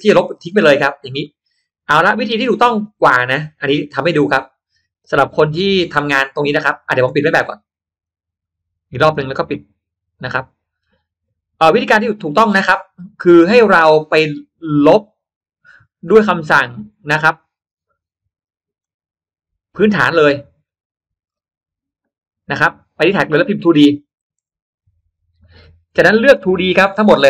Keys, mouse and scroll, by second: 0.4-1.0 middle drag, 1.1 middle click, 2.0-2.3 scroll up 1, 3.3 click, 5.4 middle click, 8.0 click, 14.8 click, 16.4 click, 18.7 click, 20.6 click, 21.2 middle click, 21.2 scroll up 1, 23.4 click, 24.5 2, 24.9 d.